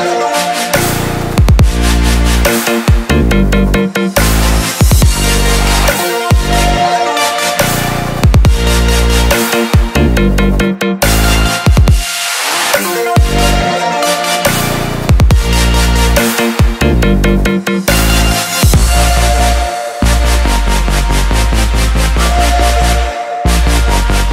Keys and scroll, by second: 12.5-16.7 typing, 17.2 Return.